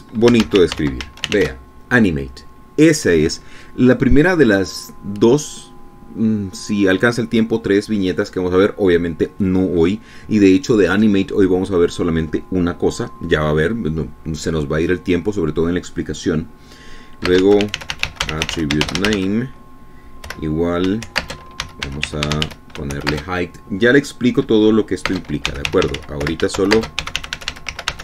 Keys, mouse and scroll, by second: 0.4-3.0 typing, 18.3-24.3 typing, 26.3-28.0 typing.